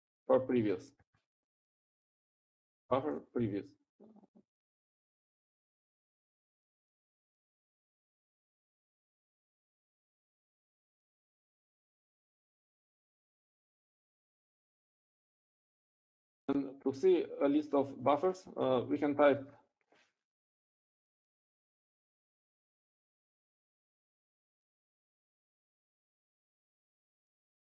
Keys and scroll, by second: 0.4-2.0 typing, 3.9-5.7 typing, 7.5 typing, 9.4-9.9 typing, 11.4-13.0 typing, 22.0 typing, 23.1-27.4 typing.